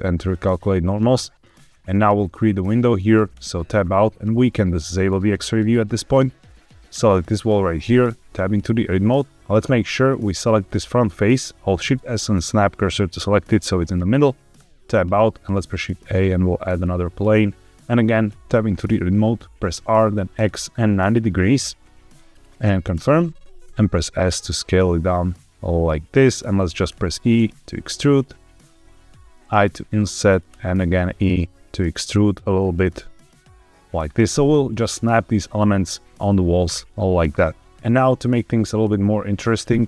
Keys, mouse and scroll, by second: 3.2 Tab, 5.0 click, 6.7 click, 8.0 Tab, 9.3 click, 9.9 click, 10.5 click, 11.6 shift+s, 13.3 middle click, 14.5 Tab, 15.4 shift+a, 18.2 Tab, 19.6 r, 20.2 x, 21.0 KP_9, 21.0 KP_0, 22.8 KP_Enter, 23.5 s, 26.1 click, 26.4 middle click, 26.8 e, 28.4 click, 28.9 i, 30.2 click, 30.4 e, 33.9 shift+click, 37.6 Tab, 38.1 middle click.